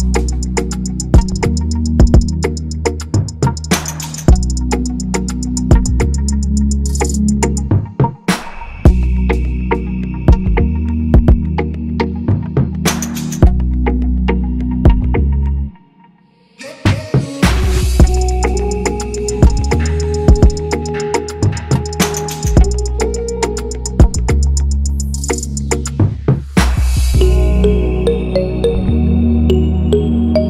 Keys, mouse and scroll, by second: 7.7 alt+shift+click, 15.4 alt+click, 23.8 shift+click.